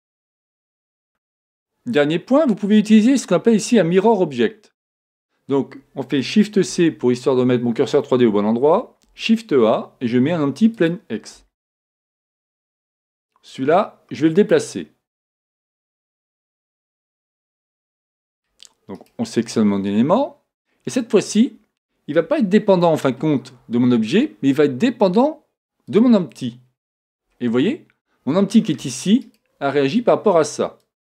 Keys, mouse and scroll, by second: 6.7 shift+c, 8.4 shift+a, 11.7-13.9 middle drag, 13.5-15.4 drag, 15.2-16.9 middle drag, 16.7-18.4 drag, 17.8-19.6 middle drag, 18.9-20.7 right drag, 21.2-24.5 middle drag, 21.2-22.6 scroll up 1, 25.1-27.0 drag, 26.8-28.3 scroll down 1, 28.3 scroll down 1, 28.5-30.1 middle drag, 29.2-31.1 right drag, 30.8-31.1 drag.